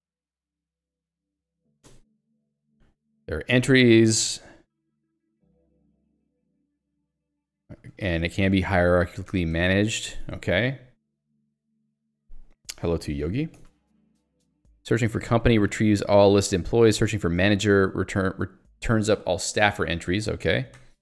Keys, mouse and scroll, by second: 1.8 Escape, 2.2 j, 6.6 k, 8.3-9.8 typing, 10.1 Escape, 14.9 j, 16.6 k, 20.9 ctrl+u.